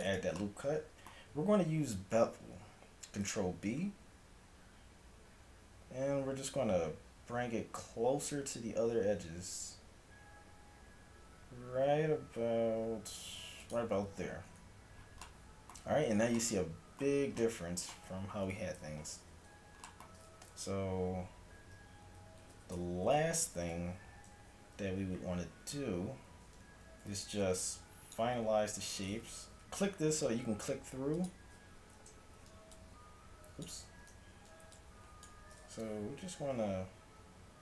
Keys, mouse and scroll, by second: 3.3 ctrl+b, 14.2 a, 14.6 Tab, 18.6 KP_7, 21.6 a, 22.1 z, 22.6 z, 22.8 Tab, 23.7 KP_5, 24.6 a, 25.0 z, 25.5 z, 27.1 a, 27.6-29.5 drag, 31.2-33.9 drag, 32.3 z, 33.9 ctrl+z, 34.2 a, 36.2 z, 36.5 g.